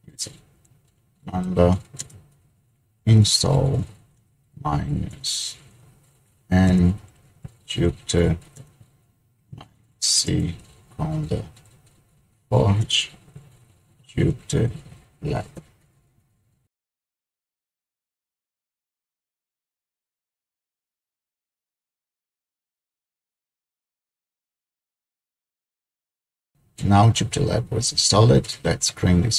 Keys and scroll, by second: 0.6-2.1 typing, 3.1-15.7 typing, 17.2 typing.